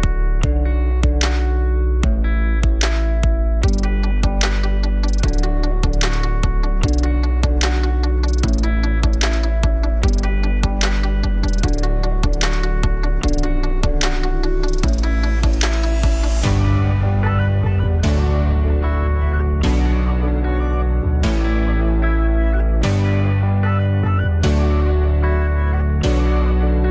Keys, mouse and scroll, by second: 1.0 click, 4.4 click, 6.7-7.7 alt+drag, 7.7 2, 7.9 click, 8.7 shift+click, 9.7 2, 9.9 click, 10.3 alt+shift+click, 10.4 alt+shift+click, 11.3 z, 14.9 click, 15.3 alt+click, 15.8 s, 18.3 click, 21.4 click, 26.3-26.9 alt+drag.